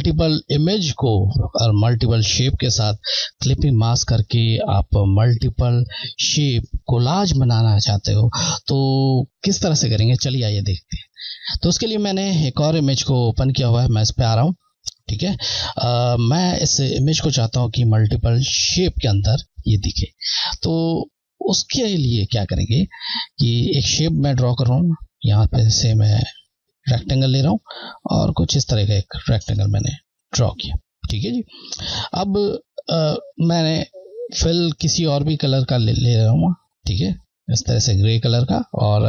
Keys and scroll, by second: 13.2 Left, 15.7-16.3 scroll, 16.4-16.7 scroll, 25.2 Left, 34.4 Left, 36.9 typing.